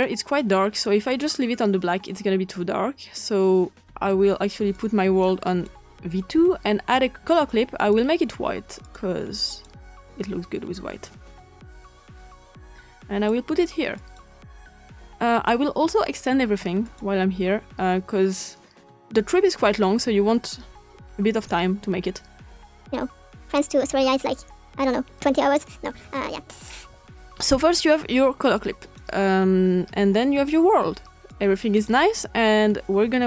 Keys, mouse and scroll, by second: 1.0 click, 3.7 scroll down 2, 4.4-5.0 scroll down 1, 4.7 click, 7.3 click, 8.7 click, 10.0 click, 11.0 click, 11.7-13.3 drag, 13.3 click, 13.9 click, 16.8 click, 17.0-18.0 drag, 19.2-21.4 drag, 22.9 click, 24.9 click, 28.5 click, 31.2 click.